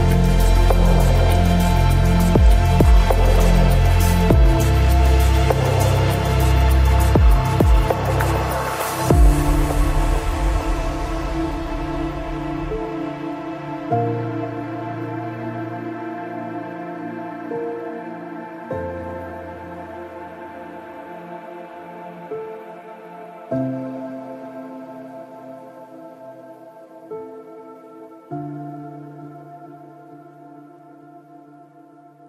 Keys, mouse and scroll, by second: 0.2 g, 1.7-4.4 right drag, 1.8 g, 2.8 g, 3.8 g, 5.2 b, 6.4 g, 8.5-9.7 right drag, 8.6 g, 10.1-13.3 right drag, 10.4 b, 11.6 click, 17.2 right click, 17.3 h, 18.5 ctrl+z, 18.5 ctrl+x, 20.0 g, 20.8 ctrl+z, 22.5 g, 24.8-28.3 right drag, 25.0 g, 26.6 g, 29.2 ctrl+Tab, 30.6 click, 30.9 c.